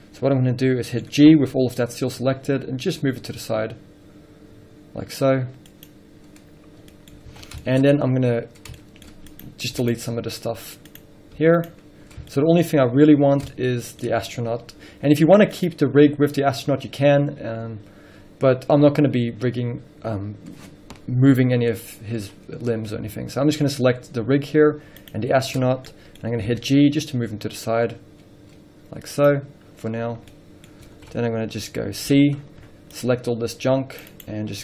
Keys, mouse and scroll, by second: 0.0-0.5 scroll up 2, 1.9 g, 6.7 click, 7.1 middle click, 7.3 scroll up 3, 7.5 alt+a, 8.0 scroll up 1, 8.7 scroll up 1, 8.9-9.3 shift+middle drag, 9.6 click, 10.3 x, 11.2 click, 12.0 x, 12.5 shift+middle click, 13.0-13.7 scroll up 2, 13.7 scroll up 1, 13.7 shift+middle click, 15.9 click, 17.4-17.8 scroll down 1, 17.8 scroll up 1, 25.4 shift+click, 25.8 scroll down 1, 26.1-30.1 middle drag, 27.1 g, 30.1 scroll down 1, 30.5-34.6 middle drag, 30.9 scroll up 1, 31.1 alt+a, 31.4-33.1 scroll up 2, 33.1 c.